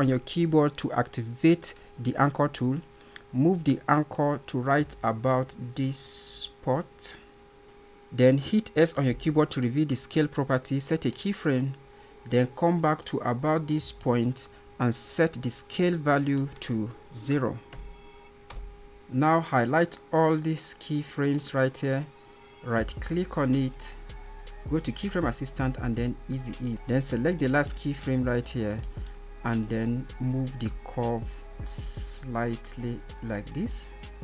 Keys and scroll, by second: 8.2 s.